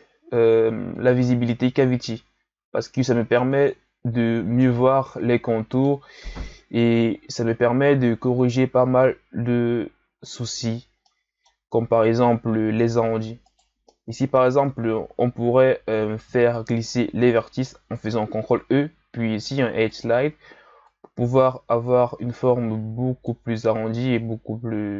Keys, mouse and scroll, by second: 0.9-4.0 drag, 4.6-7.1 middle drag, 7.1-7.6 shift+scroll down 2, 7.6-8.2 scroll up 3, 8.2-10.7 shift+scroll down 2, 10.7-11.1 scroll down 1, 11.1-12.1 middle drag, 12.1 Tab, 13.4 alt+right click, 13.9-15.1 middle drag, 15.1 ctrl+e, 23.6 Tab, 24.6 a.